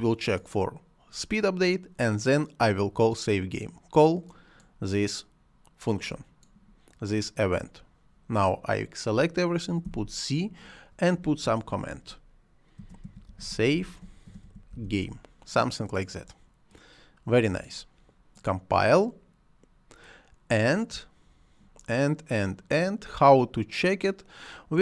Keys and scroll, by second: 9.7 c, 12.4-15.2 typing.